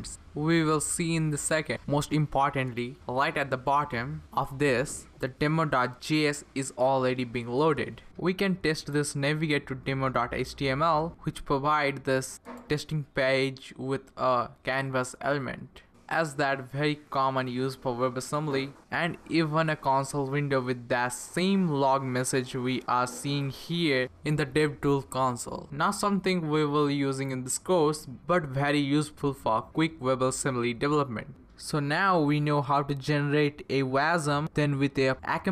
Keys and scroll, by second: 4.9-9.4 typing, 9.6 Return.